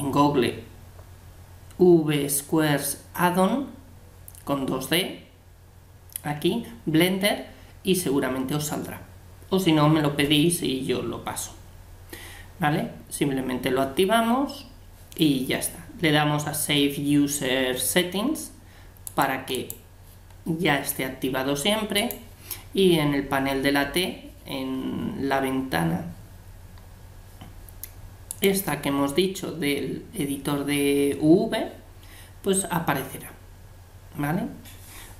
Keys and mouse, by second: 28.3-30.1 drag.